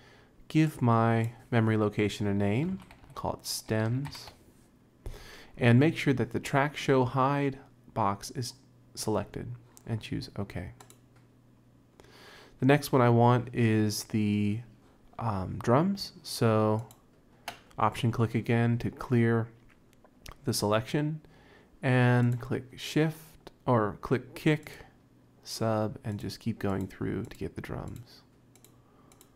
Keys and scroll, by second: 2.5-4.6 typing.